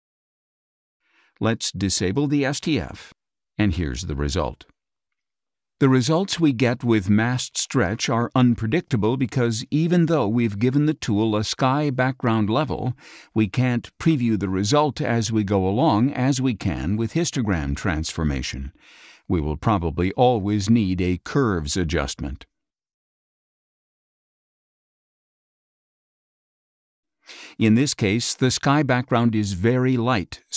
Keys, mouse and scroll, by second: 2.9 F12, 21.2 click, 23.8 click, 25.6 click, 28.2-29.9 drag.